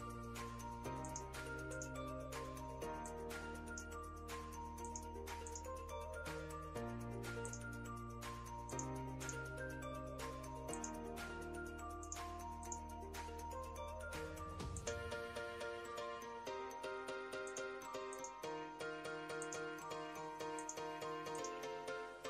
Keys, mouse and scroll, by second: 15.6 scroll down 1, 17.1 click.